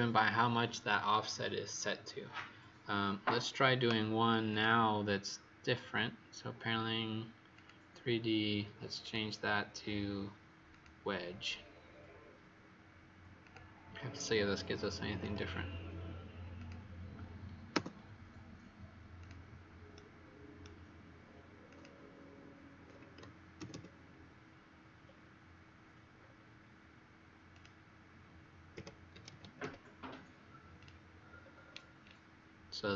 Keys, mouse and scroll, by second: 4.4 click, 15.0 Return, 16.5 click, 17.7 Return, 19.1 click, 19.9 right click, 21.6 click, 22.9 KP_8, 23.1 KP_0, 23.5 ', 23.7 Return, 25.0-26.1 scroll down 3, 26.1-26.5 scroll down 3, 27.5 click, 28.7 KP_Subtract, 29.0 KP_1, 29.2 KP_6, 30.7 click, 31.3-32.7 scroll up 6, 32.7-32.9 scroll up 2.